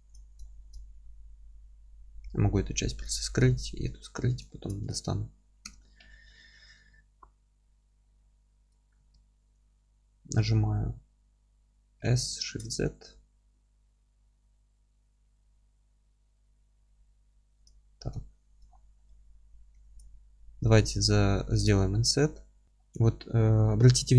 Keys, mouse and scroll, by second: 0.1 click, 0.4-3.4 alt+middle drag, 2.2 h, 2.6-3.4 scroll up 1, 3.4 click, 3.8 h, 4.2 scroll up 1, 4.5-4.9 alt+middle drag, 4.9 click, 5.6 KP_7, 6.3-7.6 scroll up 1, 7.6 alt+z, 8.0-17.6 middle drag, 8.2-8.6 scroll up 1, 8.6 Tab, 9.0 a, 17.6 click, 17.8-18.2 scroll up 1, 18.2-20.0 alt+middle drag, 18.7 scroll down 1, 19.2-19.7 scroll up 1, 19.7 3, 20.0 click, 20.3-20.6 scroll up 1, 20.6-24.1 alt+middle drag, 21.5 alt+e, 22.7-23.5 scroll up 1.